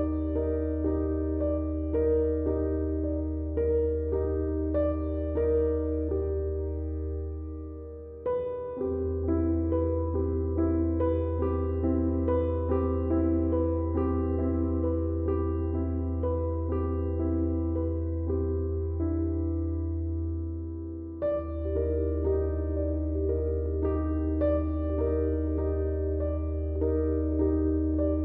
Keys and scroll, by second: 21.0 i, 24.5 ctrl+r, 25.8 Escape, 27.5 s.